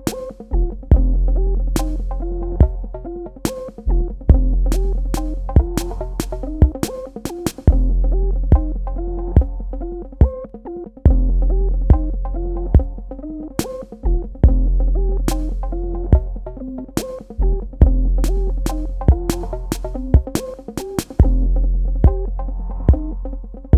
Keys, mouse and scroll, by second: 4.2 space, 4.5 ctrl+click, 23.7 right click.